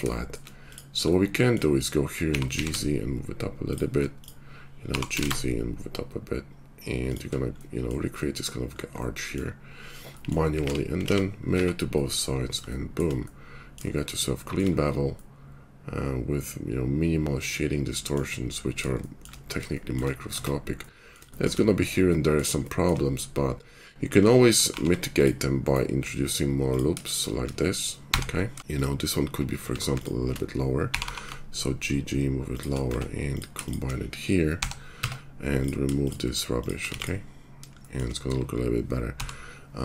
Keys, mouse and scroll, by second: 2.2 g, 4.2 click, 4.8 g, 9.6 middle click, 10.6 alt+x, 11.1 alt+x, 11.5 Tab, 11.8 middle click, 12.3 click, 14.9-15.9 middle drag, 15.9 right click, 20.3 Tab, 22.5 shift+click, 22.9 right click, 24.1 ctrl+click, 24.6 ctrl+r, 24.9 right click, 25.7-29.8 middle drag, 29.6 Tab, 30.7 g, 32.8 Tab, 34.5 j, 35.0 Tab, 37.7-39.8 shift+middle drag, 39.1 j.